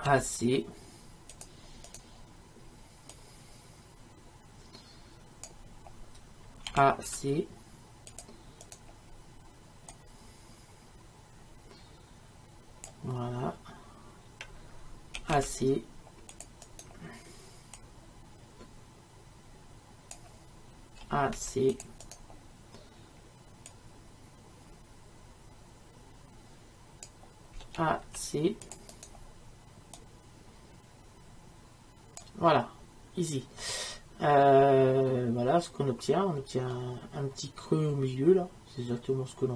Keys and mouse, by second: 2.0-6.7 drag, 3.7-6.7 right drag, 6.7 a, 8.8-15.2 drag, 15.2 a, 16.9-21.1 drag, 21.1 a, 24.8-27.6 drag, 27.6 a, 29.1-34.2 drag, 34.2-36.5 middle drag.